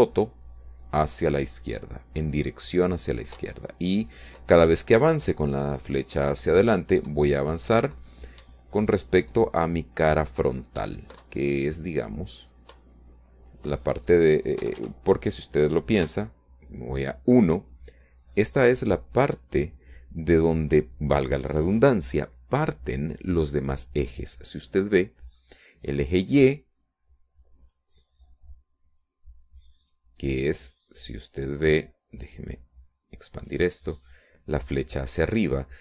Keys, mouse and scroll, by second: 2.1 Left, 6.3 Up, 10.0 Left, 11.4 Up, 13.7 Up, 14.2 Left, 15.7 Up, 17.6 Escape, 18.9 KP_1, 21.0-21.6 scroll up 2, 21.9 scroll down 2, 26.5-28.5 middle drag, 30.6 click, 32.0-33.1 drag, 35.2-35.6 drag.